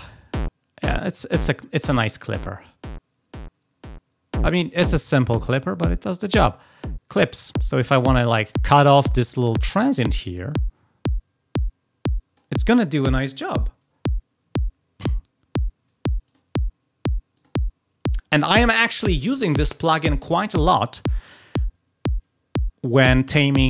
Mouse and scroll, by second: 10.4 click, 16.2 click, 17.3 click, 18.0 click.